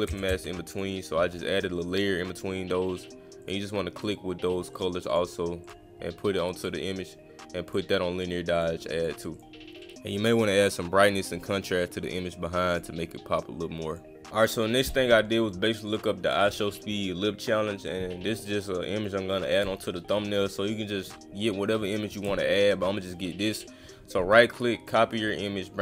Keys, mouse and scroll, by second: 0.2-0.7 scroll down 1, 0.7 click, 1.5-2.4 scroll down 1, 3.4 click, 4.0 click, 4.7 click, 5.1 click, 5.6 click, 6.6 click, 7.7 click, 8.5 click, 9.0 click, 9.3 click, 9.9 click, 11.4 click, 13.4 click, 15.9 click, 23.5 click, 24.9 click.